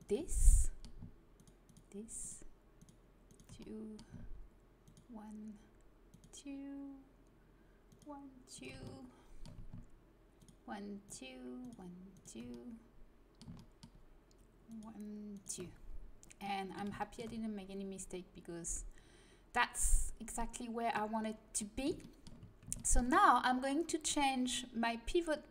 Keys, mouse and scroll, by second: 0.3 middle click, 0.6 middle click, 13.1 middle click, 13.2 right click, 13.8 middle click, 14.6-15.6 middle drag, 15.6 right click, 16.5 middle click, 17.0-19.8 middle drag, 20.8-23.1 middle drag, 24.0-25.5 drag.